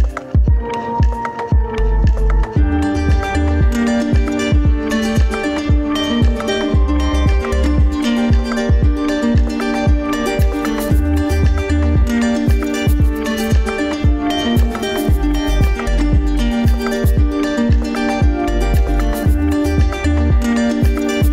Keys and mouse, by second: 2.0 ctrl+z, 2.4 ctrl+z, 3.0 middle click, 3.7 Tab, 5.6 alt+z, 6.2 middle click, 6.8 Tab, 7.3 middle click, 14.2 click, 17.8 alt+z, 20.4 click.